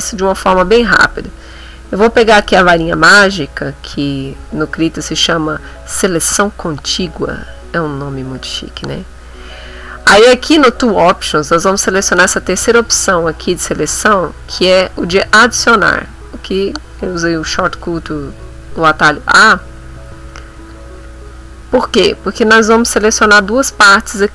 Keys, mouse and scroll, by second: 2.6 click, 15.9 click, 19.1 a, 20.7 click.